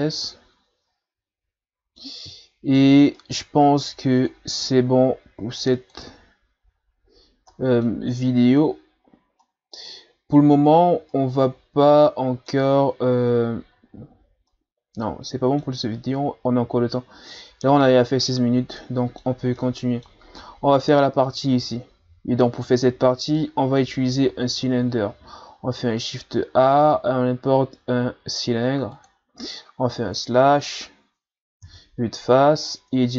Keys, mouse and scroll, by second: 0.3-4.2 middle drag, 4.2-5.8 drag, 5.9 click, 6.8-7.3 scroll up 2, 7.5 middle click, 8.3-9.1 scroll up 1, 9.1 scroll down 1, 9.4-14.1 middle drag, 14.5-17.5 middle drag, 18.8-22.6 middle drag, 23.4-24.6 middle drag, 24.6 shift+a, 30.0 KP_Divide, 31.6 KP_1, 32.6-32.9 scroll down 3, 32.9 Tab.